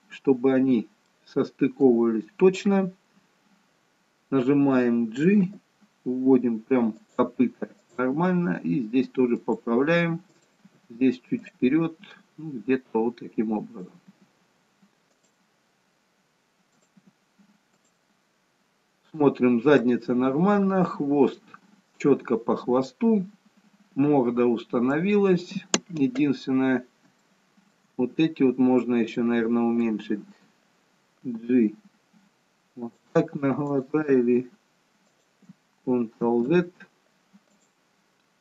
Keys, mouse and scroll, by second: 0.1 middle click, 2.0 click, 5.6 g, 8.1 click, 8.4 g, 10.4 click, 10.7 g, 13.0 click, 14.2 g, 16.8 click, 17.2 g, 20.0 middle click, 26.5-27.2 scroll up 2, 27.3 shift+middle click, 29.2 click, 31.4 g, 33.8 click, 34.1 g, 36.6 ctrl+z, 37.6 click.